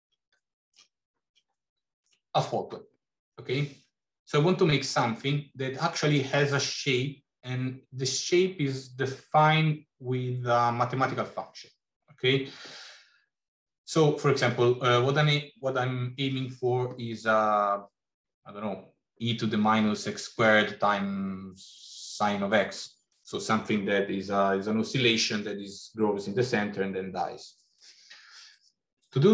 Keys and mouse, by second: 0.3 shift+middle click, 1.5 shift+middle click.